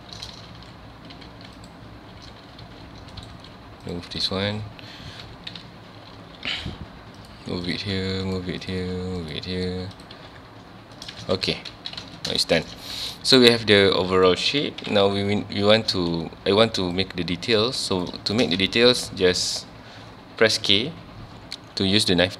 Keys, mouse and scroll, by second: 0.6 ctrl+x, 1.6 click, 2.6 g, 3.3 right click, 3.9 x, 4.2 click, 5.2 KP_7, 6.2 g, 7.7 click, 7.8 g, 8.6 click, 8.8 g, 9.3 click, 10.0 click, 10.1 g, 11.1 right click, 11.2 alt+a, 11.7 Tab, 12.0 alt+a, 12.1 scroll down 1, 12.4-12.8 shift+middle drag, 12.8 ctrl+s, 13.0 scroll up 1, 13.1 scroll down 1, 13.3-14.8 middle drag, 14.8 KP_1, 15.4 scroll up 1, 15.9 z, 16.8 click, 17.9 click, 18.3 shift+middle click, 18.6 Tab, 18.8 scroll up 1, 19.2 1, 20.8 k.